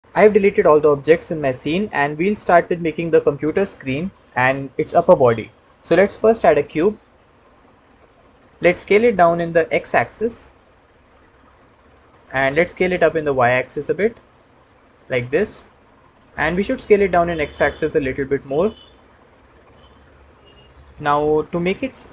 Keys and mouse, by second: 6.3 shift+a, 9.4 s, 9.6 x, 11.8 click, 12.5 s, 13.0 y, 14.4 click, 15.0-16.9 middle drag, 17.7 s, 17.9 x, 19.0 click, 20.1-21.0 middle drag, 21.5-22.1 middle drag.